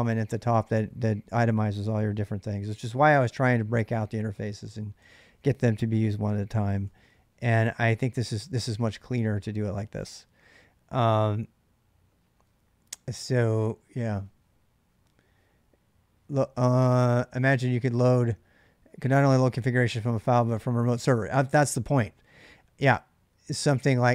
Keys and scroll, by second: 1.8 ctrl+[, 1.8 j, 2.0 j, 6.6 k, 6.8 k.